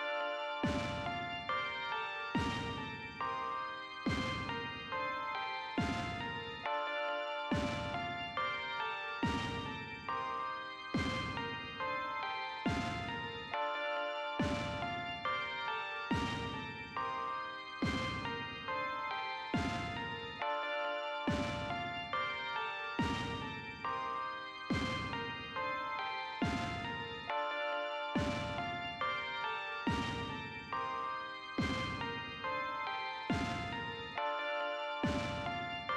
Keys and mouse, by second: 1.5-3.5 drag, 6.7 click, 9.8-13.0 drag, 16.7 click, 17.8 click, 18.8 click, 19.6 click, 20.4 click, 21.3 click, 22.0 click, 22.6 click, 23.4 click, 24.5 click, 27.1 click, 28.1 click, 29.9 click, 30.4 click, 30.9 click, 31.3 click, 31.7 click, 32.2 click, 34.8-35.9 drag.